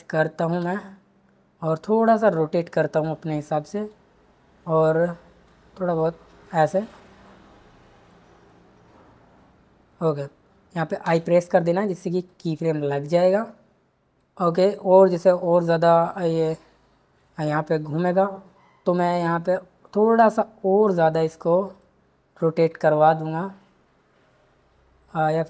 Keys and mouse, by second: 0.6 r, 5.5 click, 5.8 click, 11.0 i, 16.4 click.